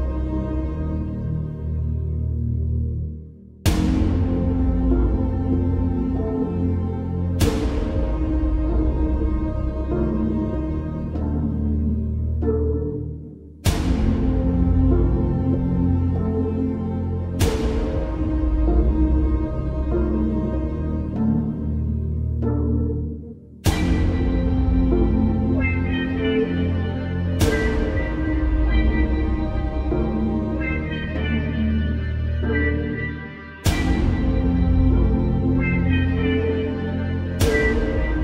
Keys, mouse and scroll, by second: 6.1 alt+click, 6.3 alt+scroll up 1, 6.4 space, 6.8 click, 7.4 b, 7.8 click, 9.4 space, 10.6 space, 14.0 click, 14.4 space, 14.5 click, 14.6 space, 15.0 click, 15.6 alt+click, 16.1 x, 16.3 click, 16.4 space, 16.5 click, 18.0 space, 18.1 click, 18.2 space, 18.7 click, 21.3 shift+click, 22.1 ctrl+g, 23.0 click, 23.8 space, 23.9 click, 24.0 space, 24.4 click, 25.8 alt+click, 27.6 x, 27.8 click, 30.8 alt+scroll down 1, 30.9 space, 31.3 click, 31.6 right click, 31.9 click, 32.3 ctrl+g, 32.9 click, 33.6 space, 33.7-34.3 click, 34.1 space, 34.5 click, 34.9 space, 35.0-35.6 click, 35.4 space, 36.2 click, 37.0 alt+scroll up 1, 37.4 space, 37.5 click, 37.9 space.